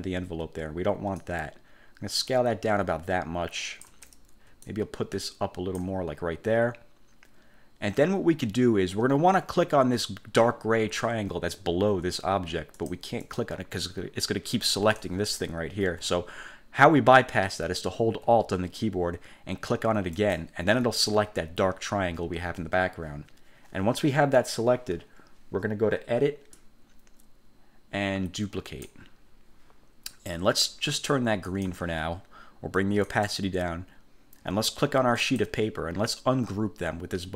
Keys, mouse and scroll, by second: 1.3 ctrl+shift+click, 4.8-6.0 ctrl+drag, 12.9 click, 13.4 click, 15.0-15.7 drag, 16.0 ctrl+z, 20.3 alt+click, 26.7-29.1 drag, 31.6 click, 33.2 click, 35.3 click.